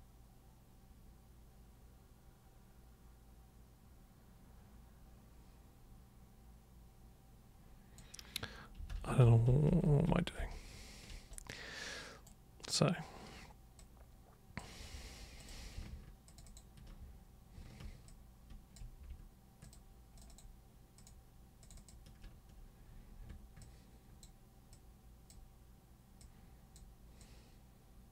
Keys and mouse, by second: 8.9 ctrl+super+z, 9.2 ctrl+super+z, 9.5 ctrl+super+z, 9.7 ctrl+super+z, 9.9 ctrl+super+z, 10.1 ctrl+super+z, 10.4 ctrl+super+z, 11.3 super+right click, 13.8-14.6 super+drag, 15.3 super+click, 16.3 ctrl+shift+super+click, 16.4 ctrl+shift+super+click, 18.1-18.7 ctrl+shift+drag, 19.6 ctrl+shift+click, 20.1 ctrl+shift+click, 20.3 ctrl+shift+click, 21.0 ctrl+shift+click, 21.6 ctrl+shift+click, 21.8 ctrl+shift+click, 23.6-24.2 ctrl+shift+super+drag, 24.7-25.3 ctrl+shift+super+drag, 26.2-26.7 ctrl+shift+super+drag, 27.2-28.1 ctrl+shift+super+drag.